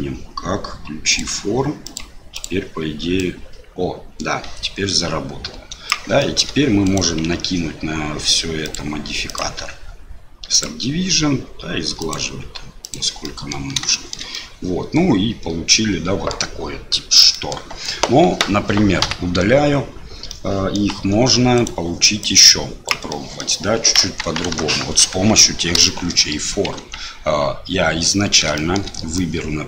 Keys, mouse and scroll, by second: 2.3 click, 3.2-6.0 drag, 6.2 shift+middle click, 6.8 click, 9.2-10.6 drag, 12.8 click, 13.2 middle click, 13.9 shift+middle click, 14.3-16.3 middle drag, 17.3 middle click, 19.0 KP_7, 20.3 middle click, 21.0 Delete, 21.5 click, 22.2 click, 23.1 middle click, 24.0 KP_1, 24.5 KP_Enter, 24.5 KP_3, 25.9 shift+middle click, 26.8 Tab, 28.5 shift+middle click, 29.3-29.6 drag.